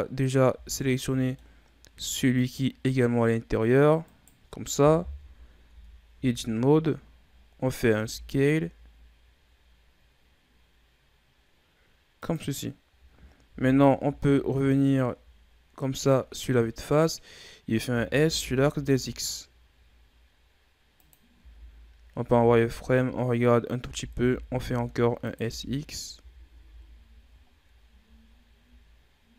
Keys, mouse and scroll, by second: 0.4 z, 0.7-1.8 middle drag, 1.8 Tab, 2.2 right click, 4.0 shift+right click, 4.9 KP_3, 5.6 Tab, 6.0 z, 6.6 scroll up 1, 7.8 s, 13.4 KP_1, 14.0 z, 14.6-15.1 scroll down 4, 15.9-16.6 scroll up 5, 17.8 s, 21.3 z, 22.1 z, 22.5 z, 23.7 s, 25.3 z, 25.6-26.0 scroll down 5, 26.0 Tab, 26.4 a, 26.7-27.4 scroll down 1, 27.4-28.2 ctrl+scroll down 2, 28.2-29.3 shift+scroll up 6.